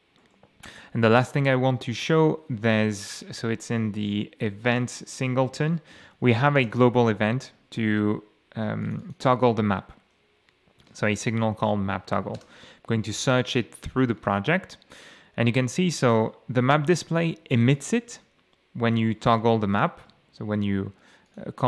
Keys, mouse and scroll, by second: 0.2 ctrl+middle click, 2.2-2.7 scroll up 2, 4.5-6.8 typing, 8.8 click, 9.8 scroll down 2, 11.0 ctrl+shift+f, 12.4 Return, 14.1 click, 17.8 click, 19.5 shift+F12, 21.3 click.